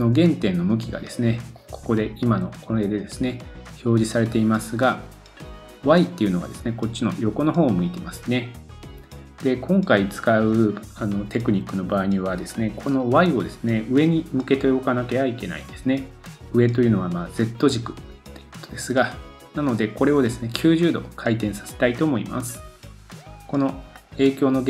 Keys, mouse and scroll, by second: 1.4-24.6 drag.